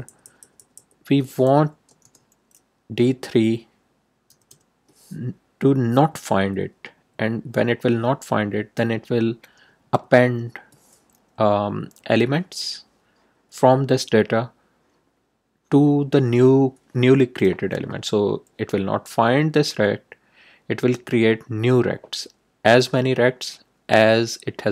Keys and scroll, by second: 2.0 shift+a, 4.2 l, 5.7 Right, 9.5 Return, 9.8 Tab.